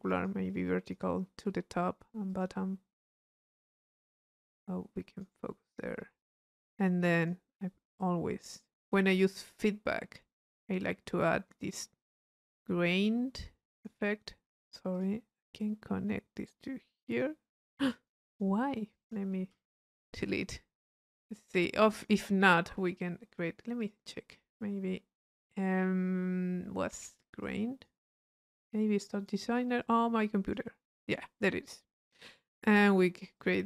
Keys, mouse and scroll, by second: 0.1 click, 0.7 click, 2.3 click, 3.1-5.5 drag, 5.9 middle click, 5.9 scroll up 1, 6.2 click, 7.0 click, 8.0-9.4 drag, 10.0 middle click, 10.8-12.5 drag, 13.1-14.1 drag, 14.5 middle click, 14.5-14.9 scroll up 1, 14.9 click, 15.6-17.5 drag, 17.8 click, 19.0 click, 19.9 click, 20.6 click, 21.8 click, 23.8 click, 27.4 click, 28.6 click, 29.1 click, 29.8 click, 32.0-33.6 drag.